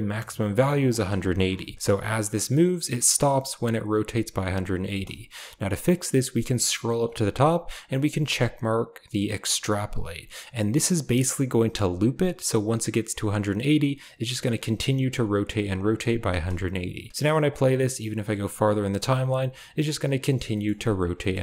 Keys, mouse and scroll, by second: 0.9 click, 1.7 space, 2.0-3.1 drag, 4.8 space, 9.6 click, 15.7-16.1 drag, 16.2 space, 17.4-17.9 drag, 18.3-18.6 drag, 19.7-20.2 drag, 19.9 right click, 20.5 shift+middle click, 21.2 middle click.